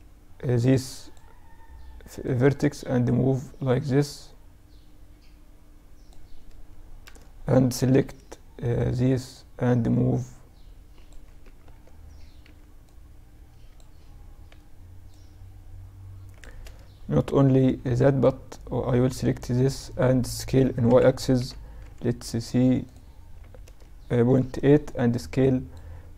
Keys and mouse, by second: 1.2-3.1 drag, 6.0 a, 7.0 b, 9.2-11.4 drag, 10.4 ctrl+z, 11.4 b, 14.1-16.5 drag, 15.6 a, 16.5 b, 19.5 s, 22.6 a, 23.4 b, 25.3 b.